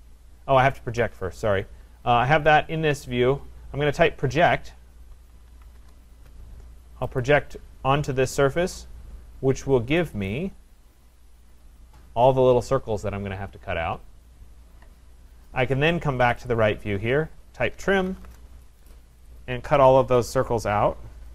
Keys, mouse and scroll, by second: 0.7-1.4 typing, 1.6-2.7 scroll, 4.0-5.8 typing, 6.0 middle click, 7.2 click, 8.2 Return, 10.1 click, 10.3 click, 11.1-12.3 scroll, 16.3 click, 16.5 click, 17.1 middle click, 17.2 middle click, 17.5-18.6 typing, 19.3 click, 19.9 click, 20.3 click.